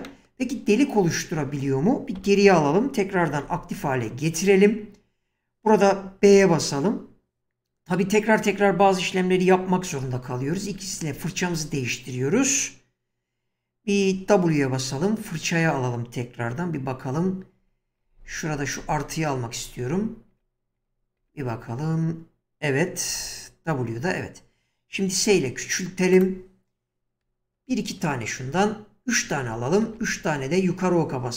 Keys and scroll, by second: 1.4 ctrl+z, 2.2 1, 3.4 ctrl+x, 6.2 b, 10.0-11.5 typing, 14.4-15.9 typing, 17.6-21.2 typing, 23.1 w, 25.2 s, 27.2 Right, 29.9 Up.